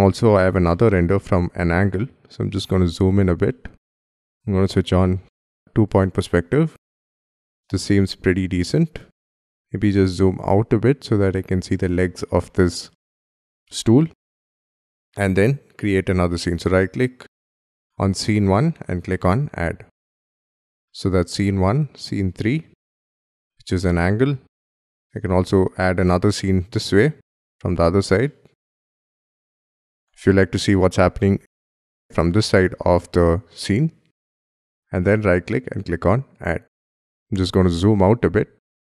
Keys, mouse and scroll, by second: 0.3-0.7 scroll up 1, 0.7 middle click, 1.6 scroll up 1, 1.9 shift+middle click, 2.6 scroll up 1, 3.1 scroll down 1, 3.4 shift+middle click, 9.6 z, 16.3 right click, 17.8 right click, 24.5-24.8 scroll up 2, 24.8 middle click, 25.3-26.0 scroll up 8, 26.0 middle click, 28.1 scroll up 2, 28.2 middle click, 28.8 shift+middle click, 28.9 scroll down 2, 29.0 middle click, 29.3 scroll up 4, 29.4 F2, 29.5 F3, 29.6-29.9 shift+scroll down 1, 29.9 shift+middle click, 32.1 shift+middle click, 35.3 right click, 37.0-38.8 typing, 38.6 scroll down 1.